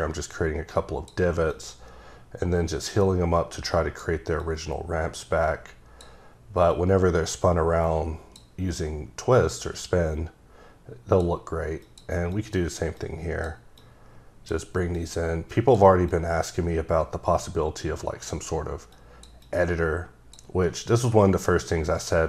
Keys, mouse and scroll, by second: 0.3 click, 1.5 click, 4.4 click, 6.7 click, 9.3 click, 11.8 click, 12.3 click, 13.0 click, 13.8 click, 14.9 click, 16.1 click, 18.9 click, 19.4 double click, 20.9 click.